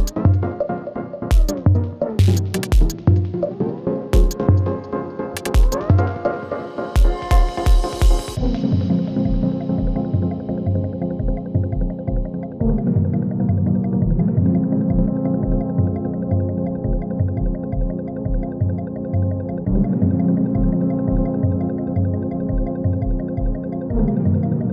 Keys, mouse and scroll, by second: 2.4 ctrl+d, 2.9-9.5 drag, 9.5 typing, 10.2 click, 13.5 Page_Down, 14.2 click, 15.1 Page_Down, 15.9 [, 17.3 Page_Down, 18.1 click, 18.4 [, 18.8 Page_Down, 19.6 click, 19.9 [, 20.9 space, 24.3 space.